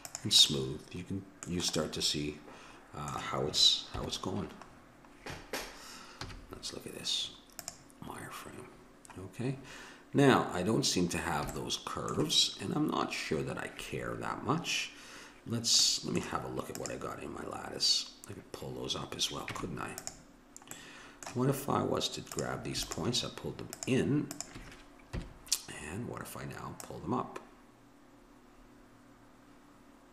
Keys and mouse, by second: 0.5-2.2 middle drag, 3.9 KP_7, 6.2 z, 8.1-11.9 middle drag, 15.8 middle click, 16.7-18.7 drag, 19.5 Tab, 20.7 middle click, 22.3-25.3 drag, 25.1 KP_7, 27.0-28.6 drag.